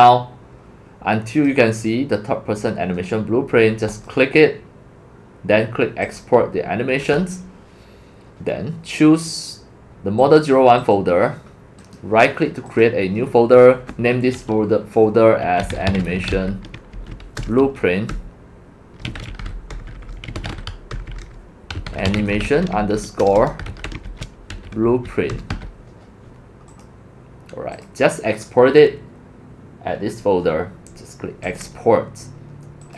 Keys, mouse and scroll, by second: 0.0-1.5 drag, 6.2 click, 10.2 scroll up 1, 10.8 scroll up 1, 11.0 click, 12.0 click, 13.1-15.4 drag, 15.2-26.0 typing, 26.8-27.2 drag, 31.4-32.3 drag.